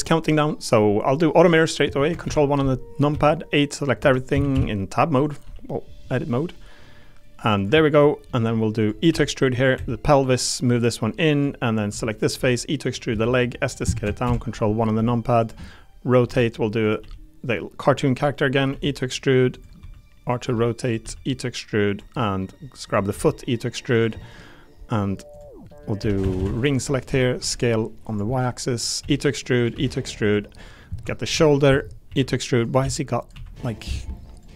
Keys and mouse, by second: 1.4 click, 3.1 a, 4.0 Tab, 4.3 a, 4.5 s, 5.4 g, 7.5 click, 7.7 click, 8.3 click, 8.8 click, 9.1 e, 9.7 2, 11.9 3, 12.1 click, 12.4 e, 12.8 click, 13.1 s, 13.7 click, 14.9 r, 15.4 click, 16.2 r, 17.0 g, 18.7 e, 19.5 click, 19.8 r, 20.4 g, 20.8 click, 21.0 e, 21.9 click, 22.2 middle click, 23.1 e, 23.9 click, 24.2 middle click, 25.7 middle click, 26.0 3, 26.4 a, 26.5 alt+click, 27.1 s, 27.4 y, 28.0 click, 28.3 middle click, 29.0 e, 29.6 click, 29.7 e, 30.2 click, 30.6 click, 32.1 e, 32.8 s, 33.2 click, 33.3 r, 33.8 g.